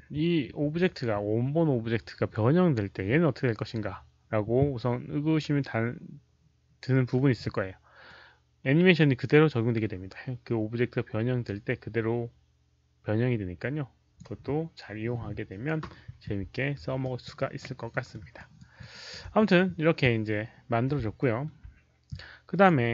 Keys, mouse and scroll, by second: 0.2 alt+middle click, 0.2 alt+right click, 0.2 alt+click, 0.2 q, 3.7 alt+middle click, 3.7 alt+right click, 3.7 alt+click, 5.6 q, 8.0-14.1 drag, 16.9 alt+click, 17.3 alt+right click, 17.8 alt+middle click, 18.3 alt+right click, 18.7 alt+click, 21.1 alt+middle click, 22.4 click, 22.6 alt+middle click, 22.6 alt+right click, 22.8 click.